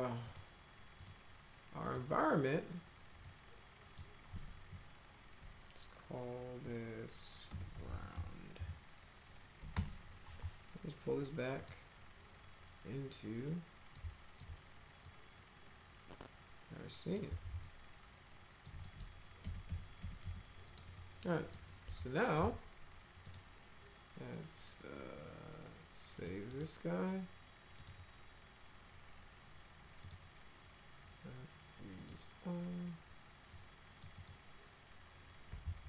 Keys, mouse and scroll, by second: 0.2 click, 1.0 click, 1.8 click, 3.2 click, 7.2-9.6 typing, 9.7 Return, 11.6 click, 13.9 alt+middle click, 15.0-17.1 drag, 17.2 z, 17.6 alt+middle click, 18.8 middle click, 19.4 F3, 19.6 F4, 20.0 F4, 20.2 F3, 20.7 click, 20.8 F4, 21.5-22.4 middle drag, 22.4 z, 23.2 right click, 26.2 click, 26.5 click, 27.8 click, 30.0 right click, 32.0 click, 33.5-34.0 drag, 34.1 right click, 35.6 ctrl+z.